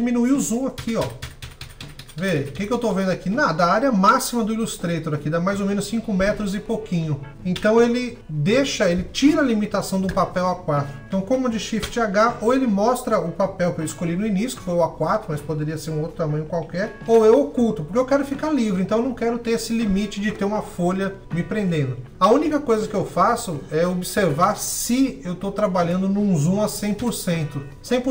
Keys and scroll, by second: 11.4 shift+super+h.